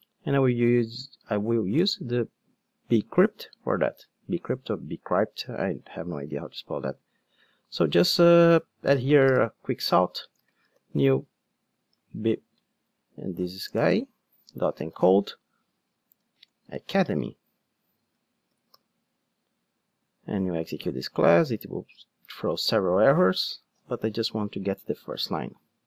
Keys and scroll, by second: 9.4 Tab, 13.8 Return.